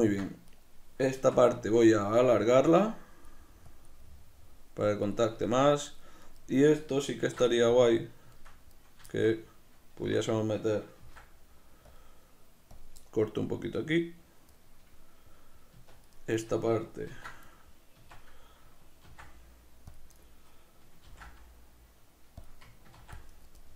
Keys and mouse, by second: 0.5 right click, 1.1 Tab, 1.6-2.7 shift+middle drag, 2.7 click, 4.0-5.1 middle drag, 5.1 click, 5.4 b, 5.6 Tab, 5.6 click, 5.8-7.2 middle drag, 7.2 ctrl+2, 7.6-12.8 middle drag, 10.0 Tab, 12.8 click, 13.0-16.2 middle drag, 15.8 Tab, 16.2 right click, 17.1 ctrl+2, 18.0 Tab, 20.2 right click, 21.1 ctrl+b, 22.4 click, 23.0 ctrl+r, 23.4 right click, 23.6-23.7 middle drag.